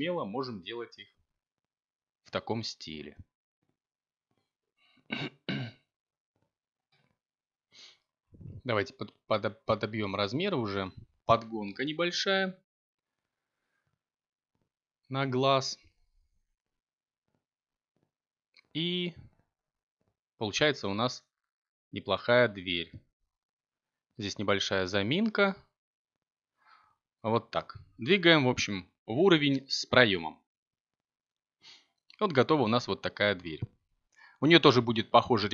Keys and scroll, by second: 25.5 a, 29.6 b, 33.7 g, 34.5 y.